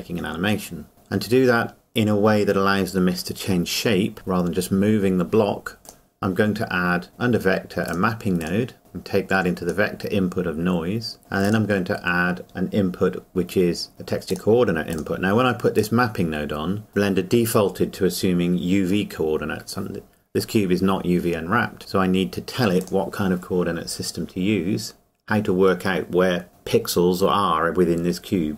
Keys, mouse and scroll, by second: 0.9-1.3 scroll down 1, 5.8 click, 11.4 click, 14.3 click, 22.8 click.